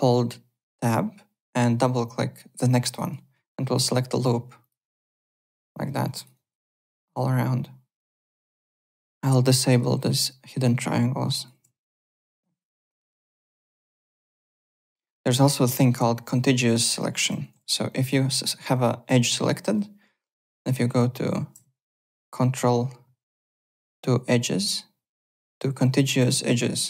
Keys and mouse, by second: 2.9 Tab, 2.9 click, 3.0 click, 4.6 click, 4.7 Tab, 5.0 click, 5.1 click, 6.0 alt+click, 6.3 alt+right click, 6.6 alt+click, 8.9 shift+right click, 12.3 alt+click, 12.5 alt+right click, 12.8 `, 12.9 click, 13.4 alt+click, 14.2 alt+Tab, 14.7 alt+click, 16.6 click, 16.9 alt+click, 17.0-18.0 typing, 17.9 alt+click, 18.7 click, 19.0 alt+click, 21.0 shift+right click, 21.5 right click, 21.8 ctrl+right click.